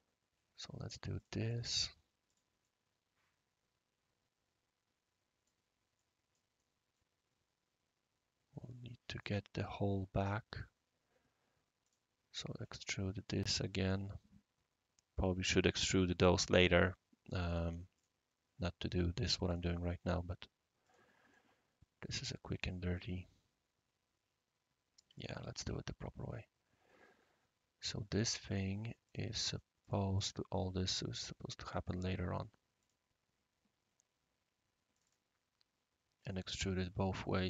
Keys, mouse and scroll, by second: 1.2 click, 1.5 click, 2.3 click, 2.6-5.5 right drag, 6.0 right click, 6.6-7.3 middle drag, 11.8 click, 13.4 click, 17.9 click, 19.4 click, 20.8 click, 21.3-25.0 right drag, 25.1 click, 25.4 ctrl+z, 27.8 click, 29.0 click, 29.5 click, 29.8 click, 30.2 click, 30.8-31.9 drag, 32.8 click, 34.9 click, 36.5 click, 37.4 click.